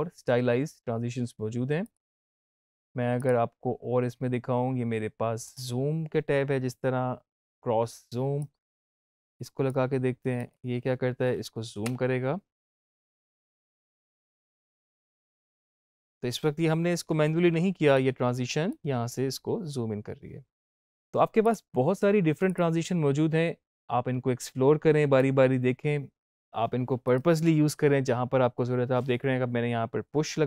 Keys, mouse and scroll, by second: 0.6 typing, 1.7 click, 5.3 click, 8.3-10.3 drag, 11.7 space, 15.4 space, 15.4-21.3 drag, 21.3 click, 25.1-26.9 drag, 27.3 space.